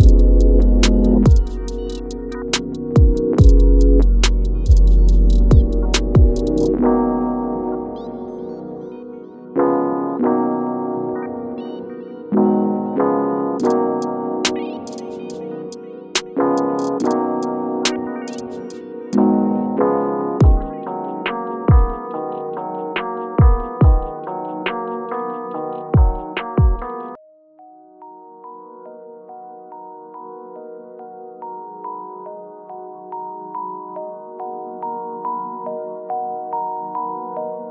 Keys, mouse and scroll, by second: 5.7 alt+scroll down 1, 6.4 shift+scroll down 1, 7.3-13.9 drag, 13.9 right click, 15.0 shift+click, 19.1-25.0 shift+drag, 26.9 ctrl+Home, 28.1 click, 29.4-29.8 alt+scroll up 1, 30.4-33.8 drag, 33.8 shift+scroll up 1, 35.6 shift+scroll down 1, 36.6 click, 37.0 shift+scroll down 1.